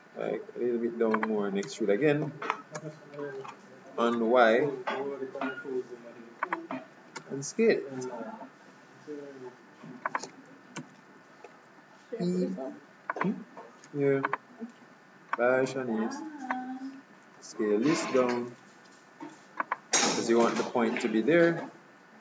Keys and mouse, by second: 1.8 e, 7.3 s, 10.9 e, 14.2 e, 15.8-17.0 drag, 17.3 s, 20.3 e.